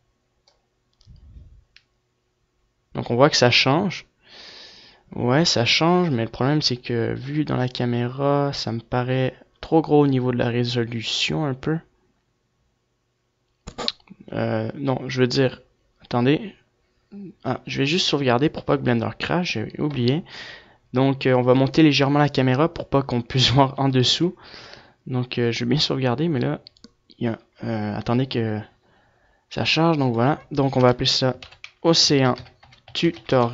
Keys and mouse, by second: 0.8 KP_0, 1.3-4.2 drag, 16.4-19.8 middle drag, 20.1 middle click.